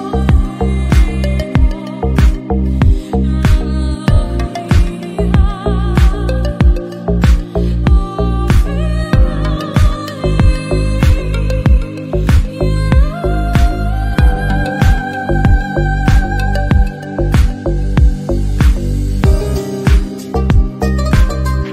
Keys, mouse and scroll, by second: 0.2 shift+a, 1.5-1.9 middle drag, 1.9 scroll up 2, 2.1-2.5 middle drag, 2.5 s, 2.9 Tab, 3.2 ctrl+r, 3.9 3, 4.0 click, 4.3 Delete, 4.7-5.1 scroll up 2, 5.1 a, 5.3 e, 6.0 Tab, 6.3 click, 7.2-9.2 drag, 9.2-10.4 middle drag, 10.8 middle drag, 11.0 click, 11.6 shift+d, 12.3 click, 12.7 Tab, 13.1 a, 13.3 ctrl+r, 14.0 shift+middle click, 14.3 scroll up 1, 14.4 alt+z, 14.5 click, 14.8 middle click, 15.0 /, 15.5 3, 15.6 click, 16.2 Delete, 16.7 shift+middle click, 16.8 scroll up 3, 16.9 middle click, 17.2 2, 17.2 click, 17.5 f, 17.7 shift+middle click, 18.0 /, 18.9 s, 20.4 KP_7, 20.6 shift+middle click, 20.7 scroll up 1, 20.9 1, 21.0 click, 21.3 g.